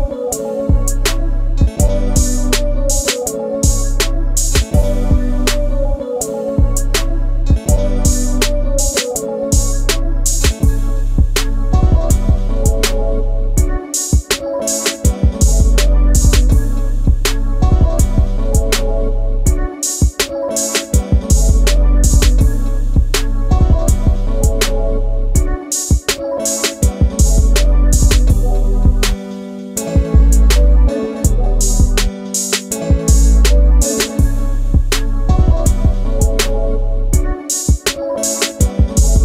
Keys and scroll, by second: 1.4 space, 2.6 Delete, 2.9 Delete, 4.8 l, 8.3 shift+space, 11.1 Delete, 12.6 Delete, 13.2 Delete, 21.4 shift+g, 27.0 Escape.